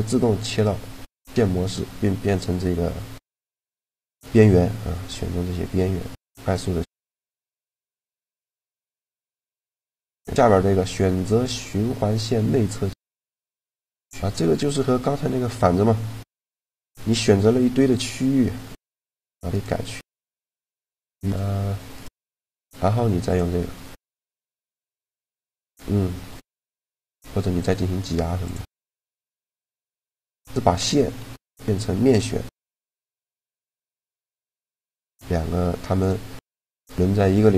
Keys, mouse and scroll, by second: 4.9 g, 8.7-10.5 drag, 16.8 ctrl+z, 18.7-23.5 right drag, 22.9 click, 23.5-24.9 drag, 25.9-27.3 middle drag, 27.2 e, 30.5 ctrl+z, 30.9 ctrl+z, 32.5 a, 35.7-37.5 drag.